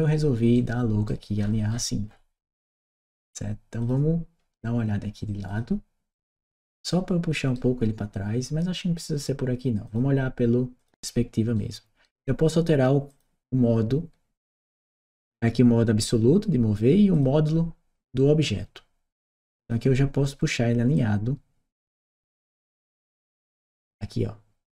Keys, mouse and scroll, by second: 0.4-0.9 right drag, 1.3 middle click, 1.3 scroll down 2, 1.9 middle click, 1.9-2.4 scroll down 4, 2.2 middle click, 2.6 right click, 3.7 click, 5.3 click, 6.0 click, 6.7 right click, 9.7 click, 10.6 click, 11.3 right click, 12.9 click, 15.0 click, 16.9 click, 19.4 click, 20.7-24.7 drag.